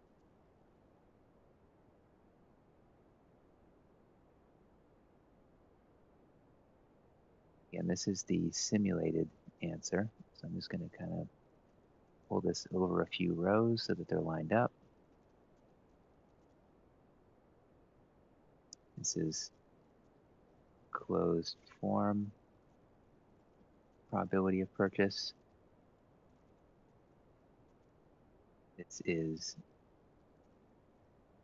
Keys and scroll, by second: 2.2 ctrl+v, 9.4 Down, 11.1 Down, 11.7 ctrl+shift+Right, 12.0 ctrl+x, 12.7 Right, 12.9 Right, 13.3 Right, 13.7 ctrl+v, 17.6 Left, 17.8 Left, 18.1 Down, 18.3 Down, 19.4 Left, 20.2-29.5 typing, 29.8 ctrl+x, 30.3 Down, 30.5 Down, 30.7 Down, 31.0 Down, 31.2 ctrl+v.